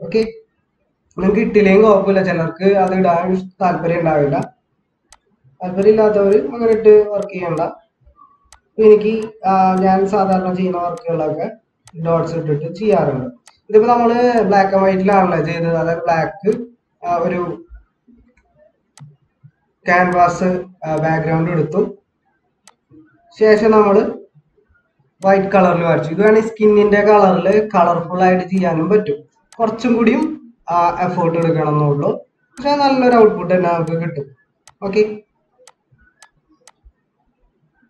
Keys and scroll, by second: 1.5 ctrl+-, 18.3 ctrl+z.